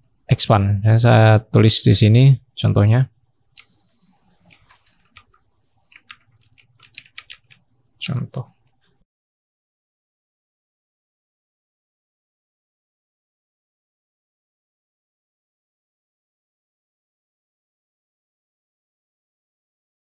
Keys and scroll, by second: 19.5-20.1 scroll down 1.